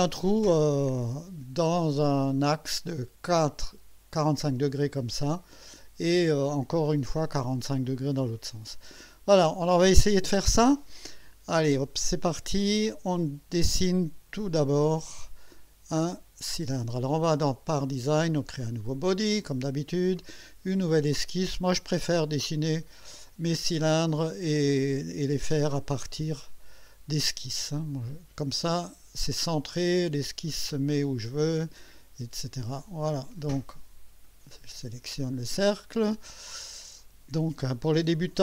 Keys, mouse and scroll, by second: 1.0-3.2 drag, 4.9 click, 6.9-8.0 drag, 8.3-9.3 drag, 12.6 click, 18.6 click, 20.2 click, 22.9 click, 26.4 click, 28.9 click, 30.9 click, 32.7 click, 33.2 right click, 34.2 click.